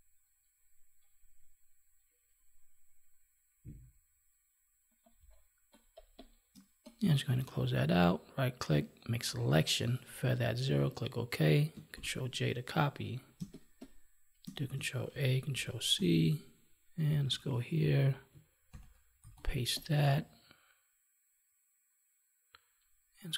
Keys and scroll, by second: 5.1 space, 11.9 ctrl+j, 13.3 space, 15.9 ctrl+Tab, 18.7 ctrl+v.